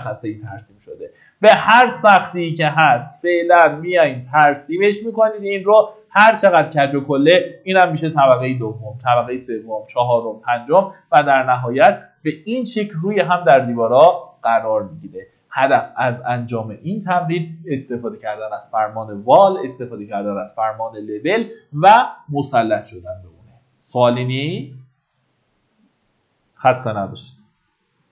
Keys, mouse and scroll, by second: 7.4 Escape, 9.6 click, 10.3-11.1 scroll down 1, 11.8 shift+middle click, 13.2 shift+middle click, 13.8 middle click, 14.4 shift+middle click, 16.1 shift+middle click.